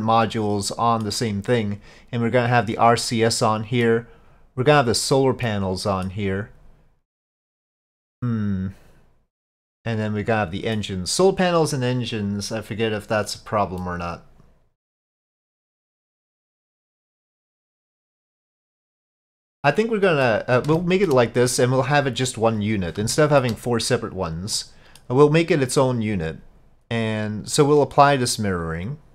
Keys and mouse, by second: 0.0-1.1 middle drag, 3.1-3.9 middle drag, 5.5-6.1 middle drag, 7.2-10.8 middle drag, 13.8-20.3 middle drag, 20.8-21.1 shift+middle drag, 23.2 shift+middle drag, 24.6-25.0 middle drag, 28.6-29.1 drag.